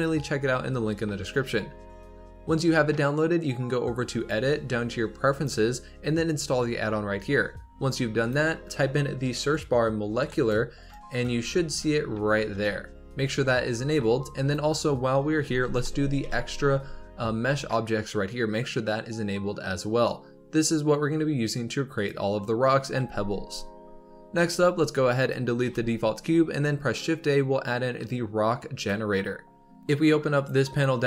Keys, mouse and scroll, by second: 4.1-7.2 drag, 24.3 x, 25.6 shift+a, 29.8-31.0 drag.